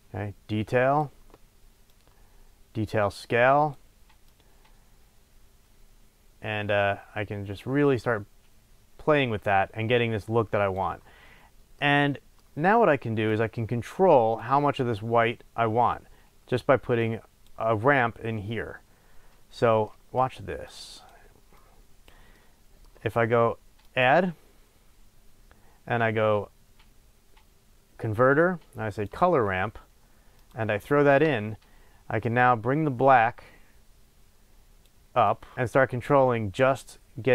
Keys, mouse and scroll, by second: 11.8 middle click, 12.8 click, 13.8 click, 16.9 click, 18.9-19.9 scroll down 3, 19.9-20.7 middle drag, 20.7 click, 21.7-22.3 drag, 22.3 middle click, 23.1-23.5 middle drag, 23.8-30.4 drag, 32.3-37.3 drag.